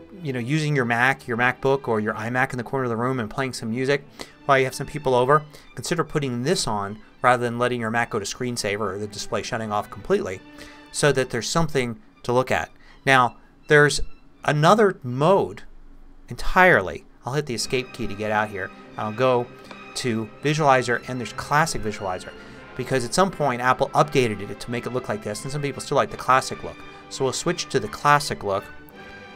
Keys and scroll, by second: 17.0 ↺, 28.9 super+t.